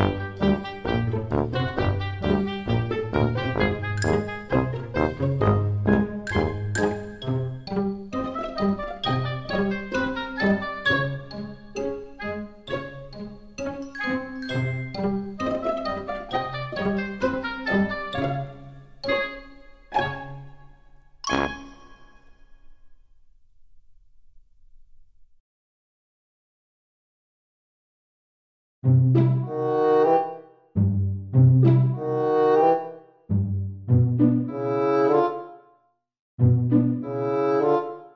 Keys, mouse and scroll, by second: 2.5 g, 10.3 click, 12.0 click, 20.2 click, 26.1 click, 33.8 scroll up 3, 34.6 middle click.